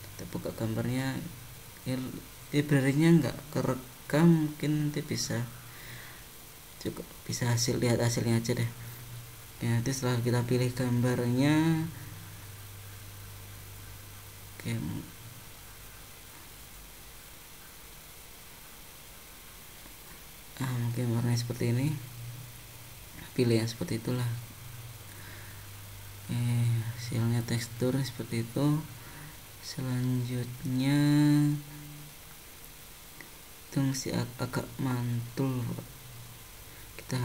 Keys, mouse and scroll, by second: 21.2 scroll down 2, 21.8 scroll down 1, 23.6-24.1 scroll up 4, 24.4 shift+middle click, 25.6 middle click, 30.5 middle click, 31.9-32.3 scroll down 3, 32.9 shift+middle click, 35.1-36.1 scroll down 5.